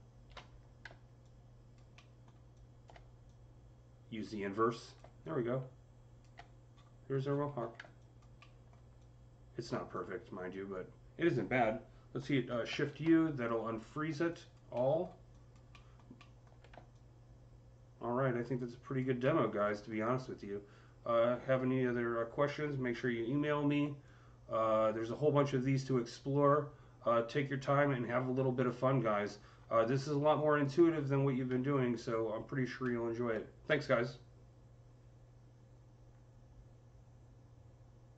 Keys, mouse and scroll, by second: 1.0-6.6 alt+drag, 1.8 alt+middle click, 6.6-6.9 scroll up 5, 7.2 scroll down 10, 7.8-12.2 alt+drag, 8.3 alt+middle click, 12.1-13.0 typing, 12.3-14.1 alt+drag, 12.3 alt+middle click, 14.6 alt+middle click, 15.2 alt+click, 15.6 alt+middle click, 16.0 alt+middle click, 16.8-19.8 drag, 19.0 alt+middle click, 19.7-20.1 scroll up 3, 21.6 scroll up 1, 22.3-22.8 scroll down 2, 22.3 c, 23.8-27.3 alt+drag, 27.0-27.4 typing, 27.4-28.9 alt+drag, 27.4 scroll down 1, 28.8-29.4 scroll up 4, 29.4 scroll up 3, 29.9 click, 30.8 scroll down 5, 31.6-35.7 alt+drag, 32.6 alt+middle click.